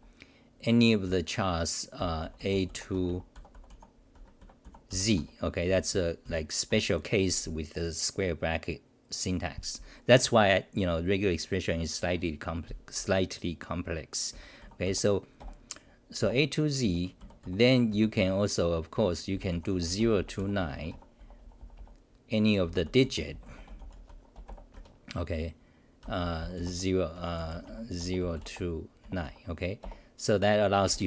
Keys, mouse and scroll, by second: 2.0-7.2 typing, 5.2 Home, 14.1-15.4 typing, 16.6-21.2 typing, 22.6-23.5 typing, 24.1 Home, 24.7 Home, 25.8-28.0 typing, 29.2 Home, 29.8 Return.